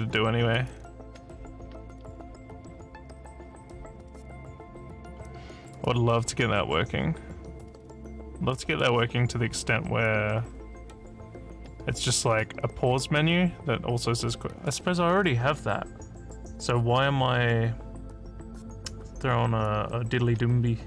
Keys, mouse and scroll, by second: 0.5 click, 5.7 click.